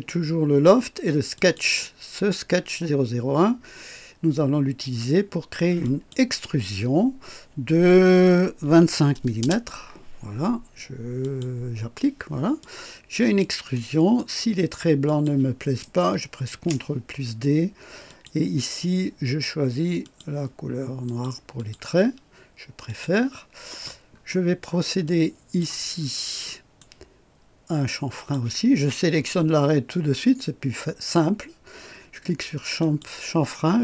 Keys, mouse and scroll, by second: 1.4 click, 5.8 click, 8.6 KP_2, 8.8 KP_5, 9.4 Return, 11.2 click, 12.6-13.6 drag, 13.7 right click, 15.0 click, 16.4 ctrl+d, 18.0 click, 20.0 click, 21.0 click, 21.5 click, 22.8 click, 23.8 scroll down 1, 24.3 right click, 25.0-25.8 drag, 26.0 scroll up 1, 26.5 right click, 28.1 click, 32.8 click.